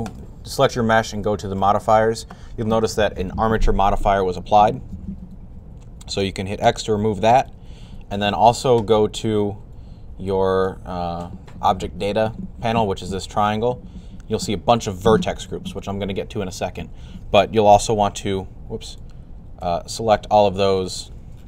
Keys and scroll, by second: 17.6 a.